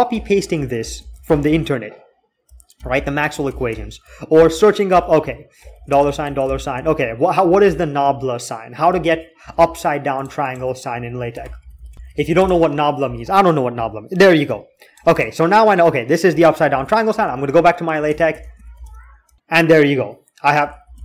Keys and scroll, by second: 0.0-7.8 typing, 1.0 alt+k, 8.8 alt+2, 10.9-12.7 typing, 16.8 alt+Tab, 17.7-19.1 typing.